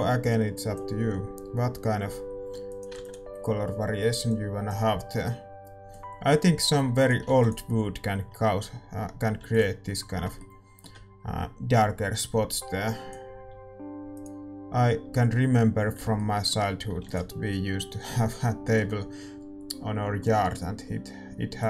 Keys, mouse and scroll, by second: 8.2 ctrl+s, 8.5-10.4 middle drag, 10.1 ctrl+s, 10.5-12.1 middle drag, 12.5-15.9 drag, 15.5-21.6 middle drag, 18.2 ctrl+s.